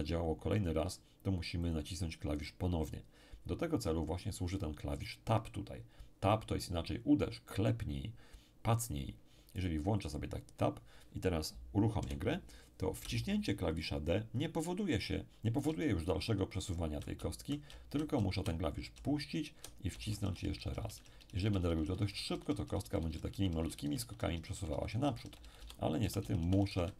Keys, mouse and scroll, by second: 1.6 click, 9.6 click, 12.0 p, 13.0 d, 13.2 d.